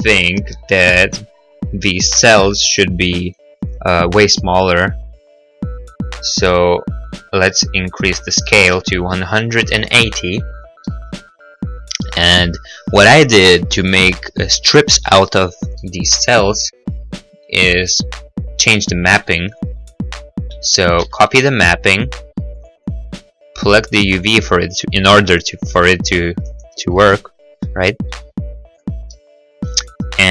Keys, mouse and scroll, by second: 8.8 1, 8.8 8, 8.8 0, 8.9 Return, 11.1 middle click, 11.6 middle click, 16.2 middle click, 16.7 middle click, 16.7-17.1 scroll, 17.9 right click, 18.2 right click, 21.3 shift+d, 21.6 y, 22.9 click, 26.9 right click, 26.9 g, 26.9 x, 28.2 y, 29.1 click, 29.5 middle click, 30.0 middle click.